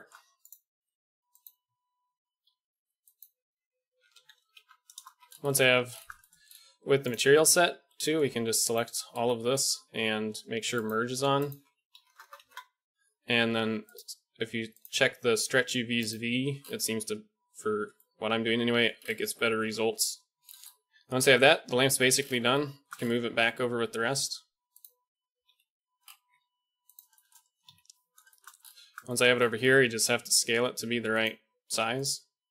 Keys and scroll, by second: 2.5 a, 3.9 l, 4.7 a, 7.9 b, 9.2 b, 12.3 KP_0, 20.7 b, 21.3 KP_1, 23.2 g, 25.4 KP_Decimal, 26.4 g, 27.6 KP_Decimal, 29.6 s, 31.2 g.